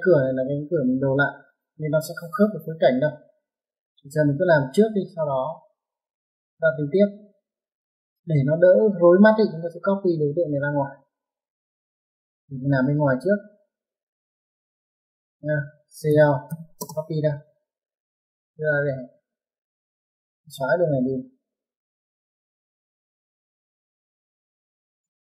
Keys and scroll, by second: 16.3-17.0 typing, 19.3 space, 22.0-24.0 typing, 25.1 typing.